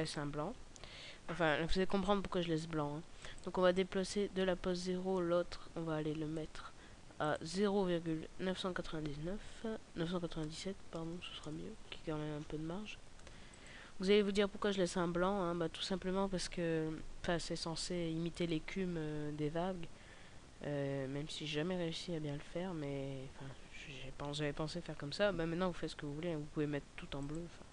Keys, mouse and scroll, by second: 3.1 click, 7.2 click, 27.1 click.